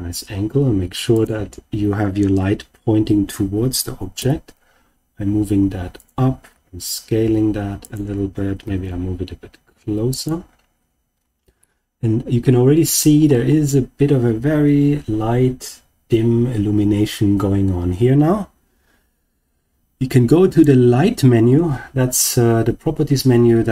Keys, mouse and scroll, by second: 1.1 click, 4.1 g, 5.9 click, 6.4 s, 7.8 click, 8.6 g, 10.1 click, 11.1-11.5 scroll down 2, 11.5-12.9 middle drag, 13.2-14.2 scroll up 3, 20.4 click.